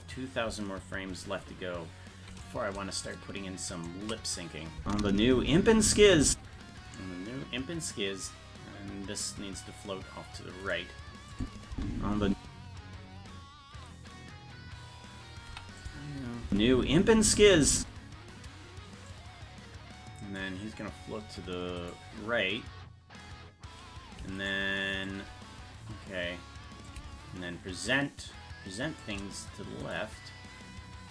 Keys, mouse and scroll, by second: 2.6 right click, 3.1-4.1 shift+right drag, 4.8 space, 9.4-9.8 scroll down 1, 10.8 right click, 10.8-11.3 scroll down 5, 11.4 click, 11.7 space, 15.5 i, 17.3 space, 19.1-20.4 drag, 20.7-21.7 scroll up 1, 21.9 right click, 21.9-22.6 scroll up 4, 24.5 shift+right click, 26.9-29.0 shift+drag, 30.0 right click.